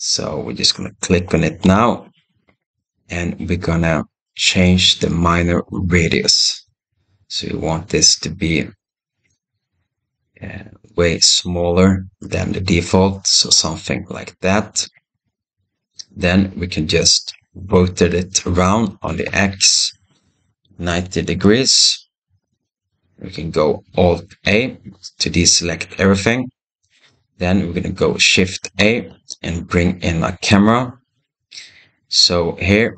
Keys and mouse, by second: 6.5-13.3 drag, 14.9-15.8 middle drag, 17.5 r, 24.3 alt+a, 28.6 shift+a.